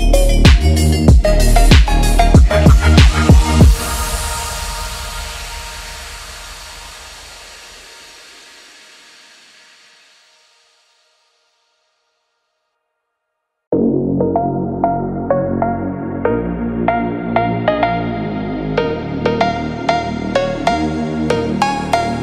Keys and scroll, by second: 0.0 2, 0.5 5.